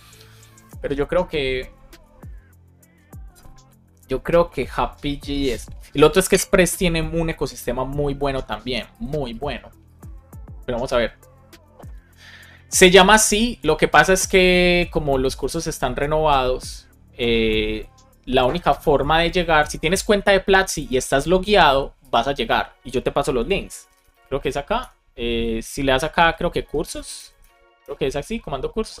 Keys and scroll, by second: 23.3 shift+1, 24.7 BackSpace, 26.5 shift+1, 27.8 Return.